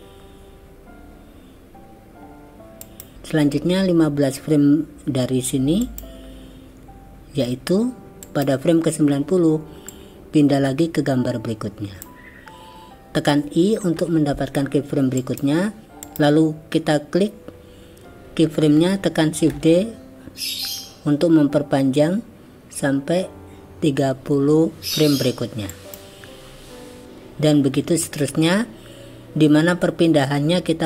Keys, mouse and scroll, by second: 5.9 click, 8.3 click, 9.9-12.1 drag, 14.0 i, 15.8 shift+d, 16.1 click, 19.6 shift+d.